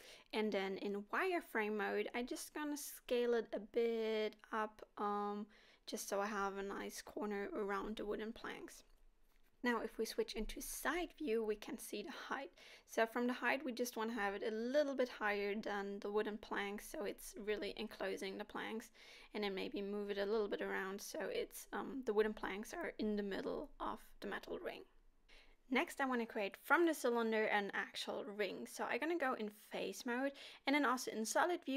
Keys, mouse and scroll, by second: 0.6 s, 2.4 Tab, 2.9 s, 8.1 middle click, 9.4 KP_1, 10.3 s, 16.3 scroll up 3, 17.3 g, 20.2 s, 22.8 g, 26.0 middle click, 27.2-28.3 scroll down 2, 28.3 click, 29.7 z, 30.8 click.